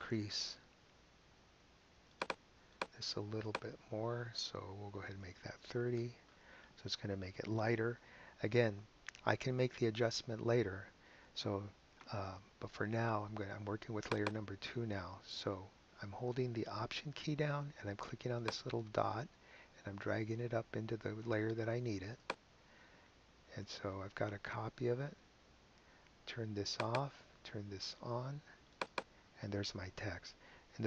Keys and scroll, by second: 5.2 3, 5.9 Return.